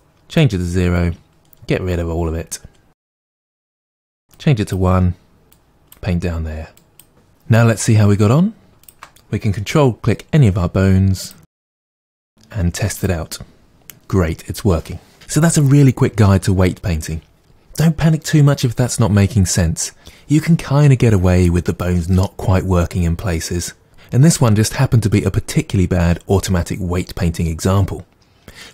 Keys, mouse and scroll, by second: 9.7 r, 11.3 click, 11.8 ctrl+click, 12.1 r, 13.0 click.